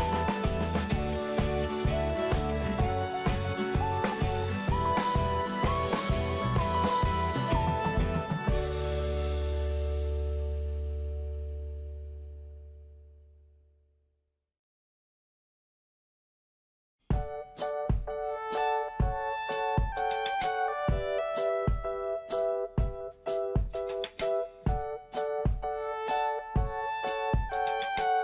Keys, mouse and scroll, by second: 9.6-10.0 scroll up 1, 10.0 scroll down 1, 13.3 click, 15.4-15.7 scroll up 1, 17.2-17.9 scroll down 1, 18.3 middle click, 19.1-20.5 scroll up 1, 20.5-21.1 scroll down 1, 22.9 middle click, 26.8 scroll up 1.